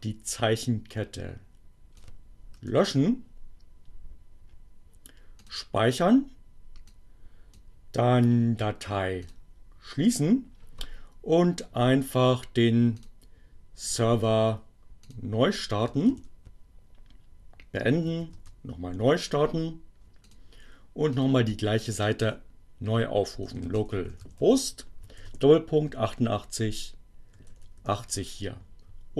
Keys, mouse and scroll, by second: 0.0 BackSpace, 3.2 click, 4.5 click, 5.7 click, 12.6 click, 13.5 click, 15.1 click, 15.6 ctrl+c, 17.5 Up, 19.4 Return, 21.8 click, 23.0 click, 23.5 l, 24.6-27.8 typing.